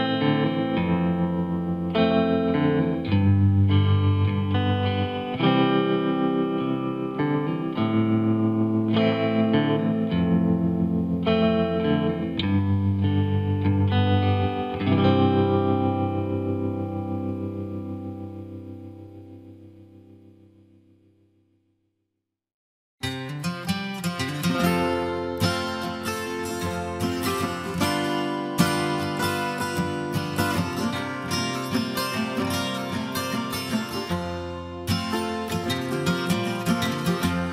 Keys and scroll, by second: 8.6 ctrl+t, 27.4 Left, 28.2 Up, 32.5 Return, 33.9 ctrl+s.